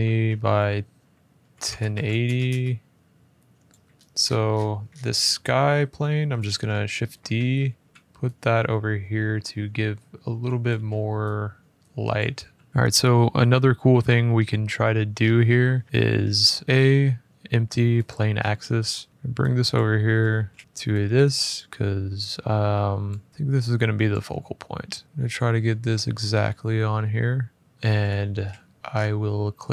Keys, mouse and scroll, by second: 0.0-2.3 typing, 0.1 Tab, 2.9-3.5 scroll, 3.5 middle click, 3.5 click, 3.7 middle click, 4.0 middle click, 4.3 middle click, 5.1 middle click, 5.1 click, 5.8 middle click, 6.2 d, 7.0 Escape, 7.9 click, 7.9 r, 7.9 g, 10.4 click, 10.5 r, 11.9 click, 12.1 g, 12.7 middle click, 14.1 middle click, 14.9 middle click, 15.0 middle click, 15.4-16.2 scroll, 16.4 middle click, 16.6 a, 17.8 click, 18.1 scroll, 19.1 click, 19.5 click, 20.1 f, 20.6 click, 20.6 middle click, 21.3 click, 22.8 click, 24.5 middle click, 24.8 middle click, 25.0 click, 25.6 middle click, 25.9 middle click, 25.9 middle click, 27.1 middle click, 27.7 middle click, 28.1 shift+middle click, 28.1 shift+scroll down 1, 28.8 scroll down 8, 29.5 click.